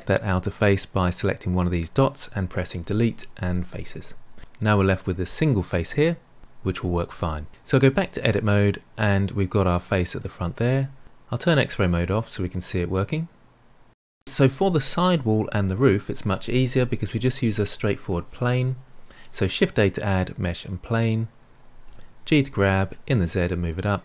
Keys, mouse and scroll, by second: 0.1 click, 2.7 Delete, 7.8 Tab, 8.2-9.6 middle drag, 9.6-11.2 scroll down 2, 11.2 click, 11.8-14.3 middle drag, 19.4 shift+a, 21.8 g.